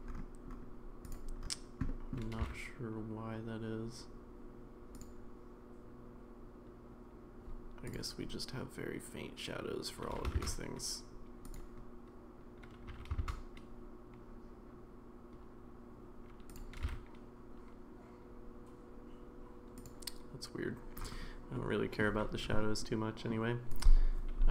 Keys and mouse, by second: 1.9 middle click, 2.4 g, 10.1 g, 12.9 g, 16.8 g, 21.6-22.0 middle drag, 22.9-23.3 middle drag, 23.8-24.5 drag.